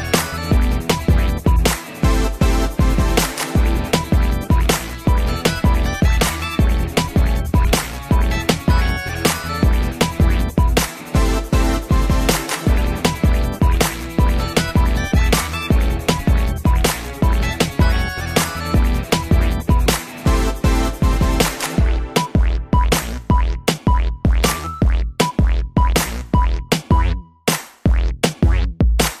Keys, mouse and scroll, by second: 1.2 click, 1.3 click, 3.7 click, 6.7 g, 7.8 click, 7.9 click, 8.6 click, 12.2 ctrl+c, 13.2 click, 16.8 click, 18.4 click, 18.8 ctrl+v, 19.0 middle click, 20.2 middle click, 20.7 scroll up 2, 21.2 shift+middle click, 21.3 shift+middle click, 21.5 middle click, 22.2 middle click, 23.1 middle click, 23.2 click, 24.8 click, 28.8 click.